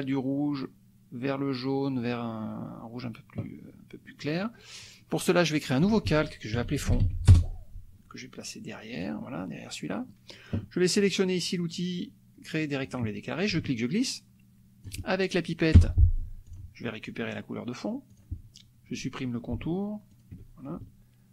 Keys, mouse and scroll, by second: 5.7 click, 6.5-7.4 typing, 9.0 click, 10.1 click, 12.8 click, 13.4-15.0 ctrl+drag, 15.9 F7, 16.5 click, 18.1 click, 20.1 shift+click.